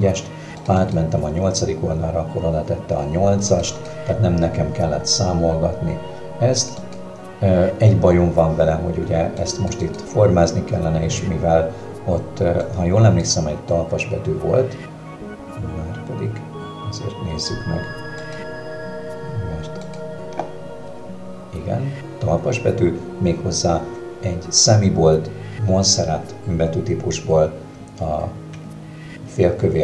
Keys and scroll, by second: 29.0 Escape.